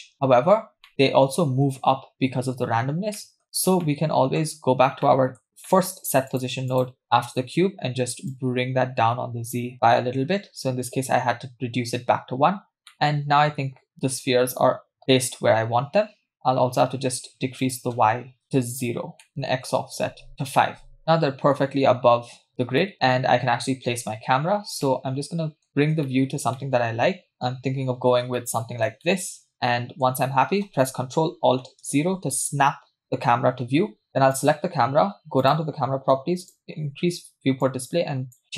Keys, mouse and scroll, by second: 0.1 space, 0.4-0.9 scroll up 4, 0.9 middle click, 3.2 middle click, 3.9 middle click, 4.6-5.0 scroll up 2, 5.0 middle click, 5.7 middle click, 6.3 click, 6.7 click, 7.0 drag, 8.3-9.7 drag, 12.5-12.9 scroll down 2, 12.9-15.4 middle drag, 17.6 click, 19.2 middle click, 19.3-20.3 drag, 20.9-21.4 scroll down 3, 21.0-22.5 middle drag, 22.5-22.8 scroll up 2, 22.8 middle click, 23.0-23.6 scroll up 1, 23.7-24.2 scroll down 1, 24.2 scroll down 1, 24.9-26.4 middle drag, 26.5-28.2 middle drag, 28.3 shift+middle click, 29.0-30.1 middle drag, 34.3 click, 35.4 click, 36.4 click, 36.7-37.2 scroll down 1, 37.2 scroll down 1, 37.6 click.